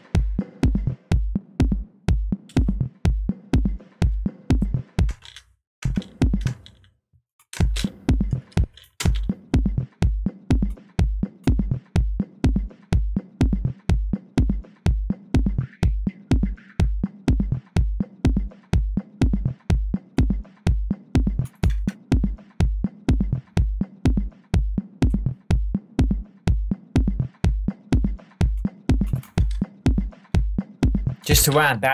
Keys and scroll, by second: 5.0 space, 7.8 space, 31.3 space.